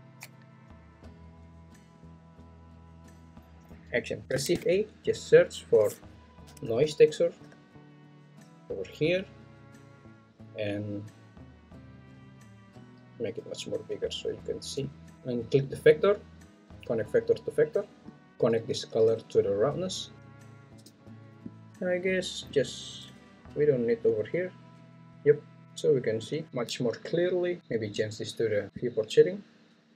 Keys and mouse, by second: 4.5 shift+a, 12.8 click, 15.6 click, 15.9-17.9 drag, 19.1 click, 19.3-20.8 drag, 21.8-22.8 drag, 24.1 click.